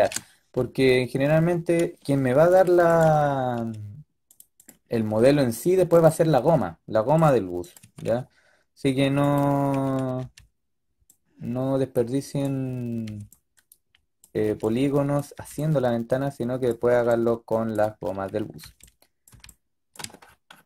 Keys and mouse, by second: 2.8 click, 3.3 click, 4.6-6.6 drag, 7.7 a, 7.9 a, 9.6 a, 9.9 a, 10.1 b, 12.9 b, 14.3 b, 15.2 b, 16.8 b, 18.5 b, 19.2 b.